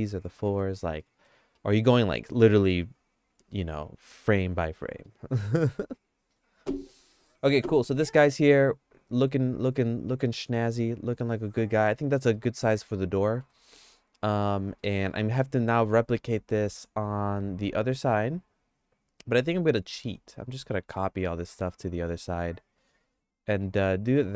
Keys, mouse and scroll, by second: 1.0 middle click, 1.6 shift+middle click, 2.4 middle click, 3.4 middle click, 3.8 shift+middle click, 5.0 middle click, 5.9 click, 7.9 r, 12.0 middle click, 12.3-13.4 shift+middle drag, 13.9 middle click, 14.8 middle click, 15.1-24.3 shift+middle drag.